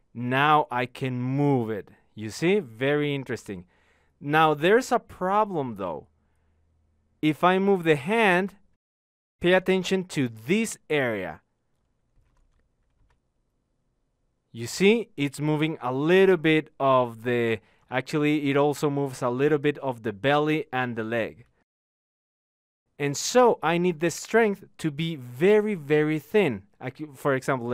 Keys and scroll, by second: 21.3 ctrl+z.